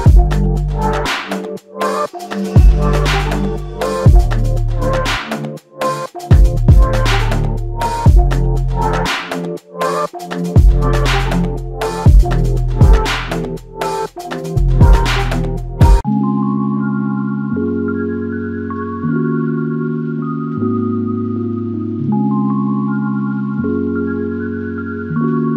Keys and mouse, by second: 1.5 alt+click, 4.1 alt+click, 9.4 ctrl+click, 10.3 ctrl+i, 13.3 alt+click, 17.3 ctrl+click, 18.5 alt+click, 19.6 ctrl+click, 22.8 ctrl+click.